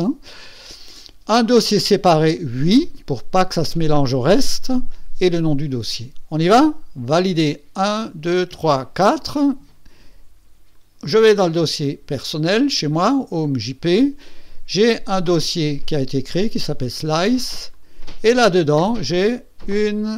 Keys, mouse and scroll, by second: 7.2 click, 10.7 click, 17.5 click, 19.0 click, 20.1 click.